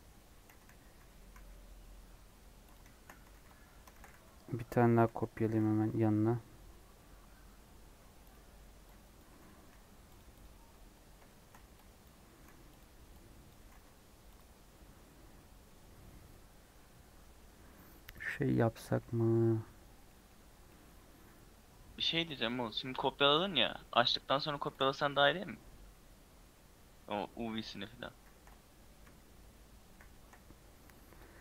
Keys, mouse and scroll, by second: 0.5 g, 2.8-3.9 shift+middle drag, 3.9 shift+d, 9.1 click, 9.3 g, 10.4 click, 11.2 shift+middle click, 12.0 click, 12.3 g, 13.4 click, 13.5 g, 22.3 click, 22.5 scroll up 1, 23.3 scroll up 1, 23.9 scroll up 1, 29.9 shift+s, 30.6-31.0 scroll down 1.